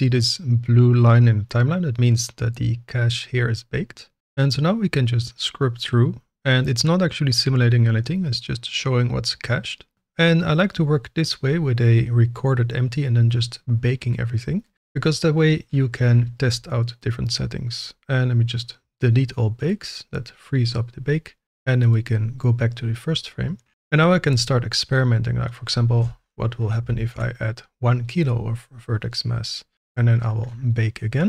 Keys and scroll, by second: 27.1 Return.